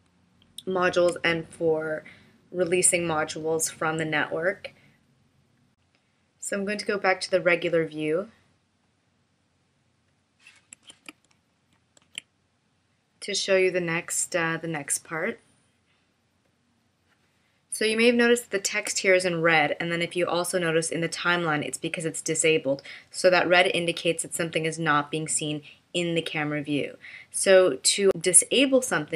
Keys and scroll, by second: 10.9 super+f, 12.0 super+f, 17.9 space.